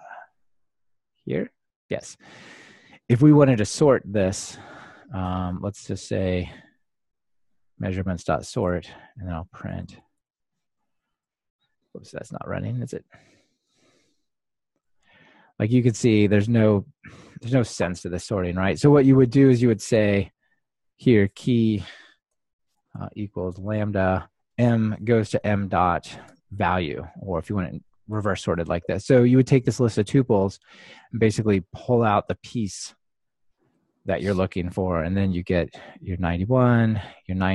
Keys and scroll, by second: 7.9 Return, 11.3 ctrl+r, 13.7 ctrl+r, 24.1 Return, 31.9 ctrl+alt+shift+Right, 34.5 ctrl+r.